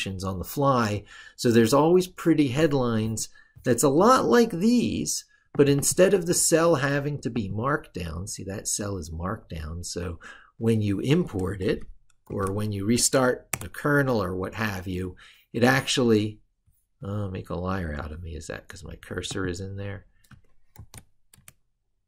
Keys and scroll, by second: 12.1 ctrl+shift+r, 20.5 ctrl+shift+r.